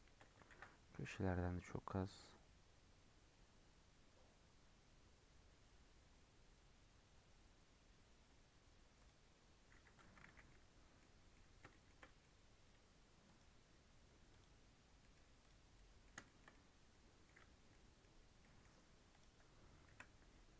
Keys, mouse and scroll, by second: 0.4 ctrl+b, 9.8 Tab, 10.0 scroll down 1, 10.2 alt+z, 10.4-10.9 middle drag, 10.9-11.2 scroll up 3, 11.2-12.5 middle drag, 12.5-14.2 right drag, 14.2 click, 14.8 scroll down 1, 14.9-15.3 middle drag, 15.3 click, 15.5 scroll up 1, 15.7-16.0 middle drag, 16.0 scroll down 3, 16.2-17.4 shift+middle drag, 17.4 scroll up 1, 17.6-18.2 middle drag, 18.2 scroll up 1, 18.3-19.0 middle drag, 19.0 click, 19.8 KP_Decimal.